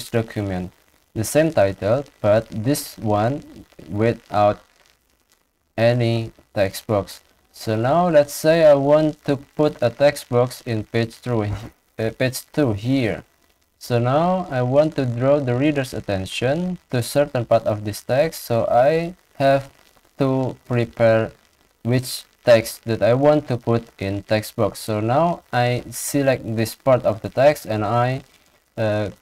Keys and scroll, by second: 21.1 ctrl+shift+Down, 21.5 ctrl+shift+Left, 23.0 ctrl+c, 26.3 ctrl+shift+Down, 26.5 ctrl+shift+Left, 27.8 ctrl+c.